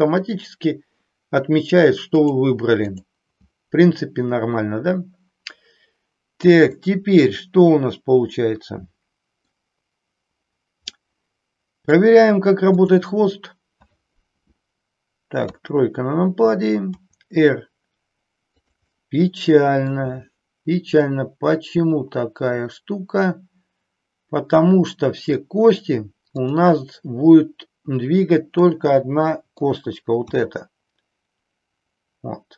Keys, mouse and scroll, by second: 2.2 click, 6.8-9.4 middle drag, 11.1-12.0 middle drag, 12.7-14.1 drag, 15.5 KP_3, 17.0 r, 18.7 click, 19.0-20.0 middle drag, 21.1-25.3 middle drag, 26.3-27.8 drag, 28.5-29.7 middle drag, 30.2 r.